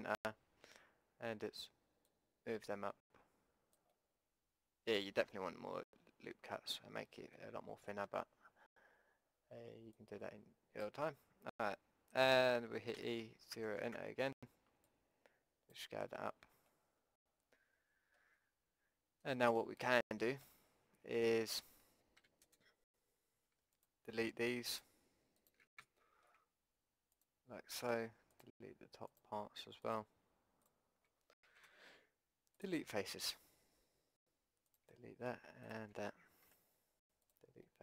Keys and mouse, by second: 3.9-5.7 middle drag, 7.6-8.9 middle drag, 10.0-12.0 drag, 13.0 e, 14.8-16.7 drag, 16.7 middle click, 22.2 a, 23.8-25.9 drag, 26.0-31.0 middle drag, 31.6 Delete, 36.5 Delete.